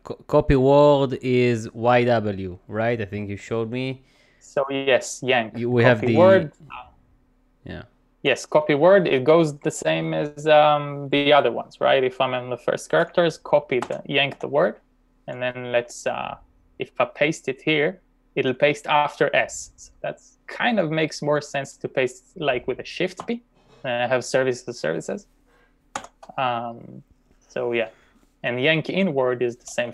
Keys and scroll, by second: 5.7 typing, 13.9 y, 14.4 w, 23.2 shift+p, 26.0 u, 29.6-29.9 typing.